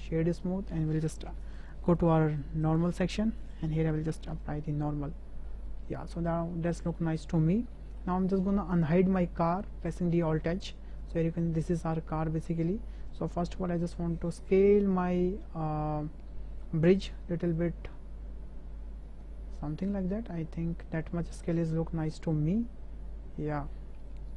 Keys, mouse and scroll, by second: 1.5 click, 2.6 click, 3.5 click, 4.4 click, 5.5-6.3 middle drag, 6.7 shift+drag, 7.0 middle click, 7.7 shift+drag, 10.1 alt+h, 13.1-13.4 drag, 14.5 s, 19.2 s.